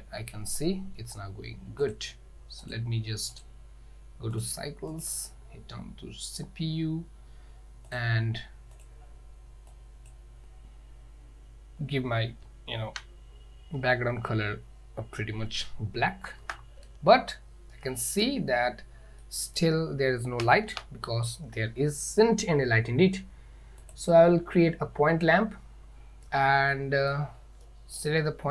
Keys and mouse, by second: 2.9-3.5 drag, 4.5-5.2 drag, 7.9 drag, 12.5 z, 16.5 KP_0, 17.8-18.3 middle drag, 19.3-19.6 middle drag, 20.7 shift+a, 26.9-27.2 middle drag, 27.7-28.0 middle drag.